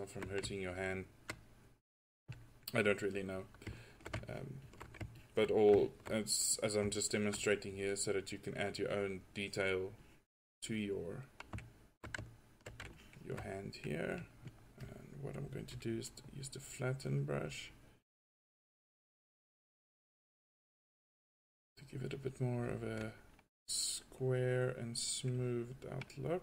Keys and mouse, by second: 6.3-9.3 drag, 9.5 click.